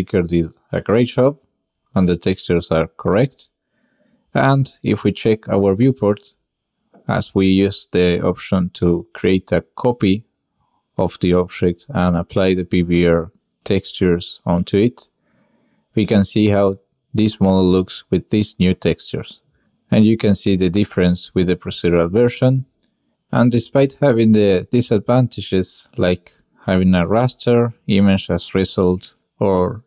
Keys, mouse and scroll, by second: 3.2-3.8 drag, 4.5-4.9 shift+middle drag, 5.1 click, 5.9-6.2 middle drag, 6.8 click, 7.4 drag, 8.8 middle click, 8.9 drag, 9.4-9.8 drag, 9.9 shift+click, 10.8-11.2 drag, 12.8-13.2 drag, 14.0-14.4 ctrl+middle drag, 14.6 shift+middle click, 16.5 click, 17.0 click, 20.9 click, 21.5 click, 25.1 click, 27.5-27.9 shift+drag, 28.1 shift+click, 28.3 drag.